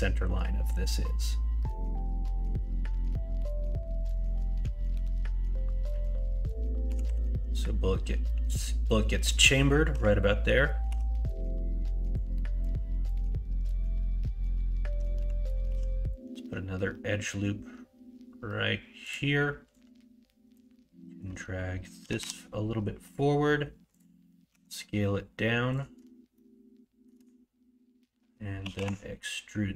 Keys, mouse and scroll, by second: 6.8 g, 10.8 3, 15.6 ctrl+r, 20.5-22.0 drag, 22.0 g, 24.5 s, 26.3 shift+middle click, 28.6 e.